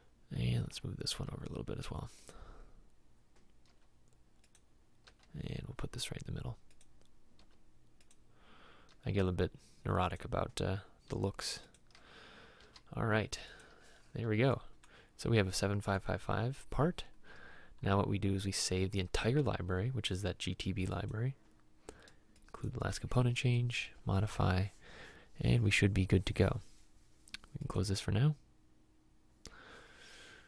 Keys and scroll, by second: 1.3 m, 3.8 m, 9.0 m, 12.8 m.